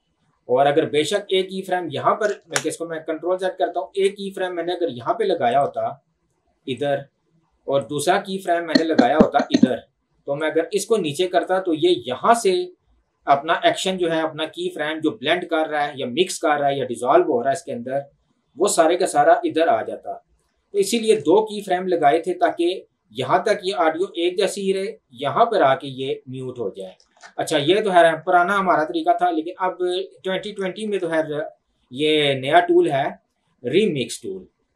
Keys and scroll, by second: 2.4 ctrl+z, 21.0 ctrl+z, 27.1 ctrl+z, 30.9 ctrl+z.